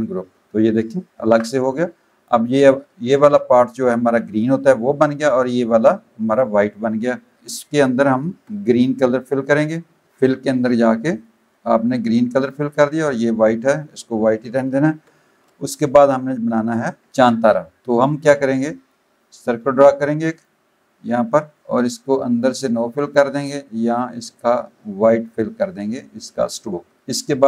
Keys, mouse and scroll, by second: 0.4 click, 1.2 ctrl+z, 1.6 click, 2.2 click, 3.2 click, 5.6 click, 6.2 click, 7.5 click, 8.8 click, 10.1 click, 11.2 click, 12.4 click, 17.8 click, 18.9 click, 20.4 click, 22.3 click, 22.9 click, 23.8 click, 25.3 click.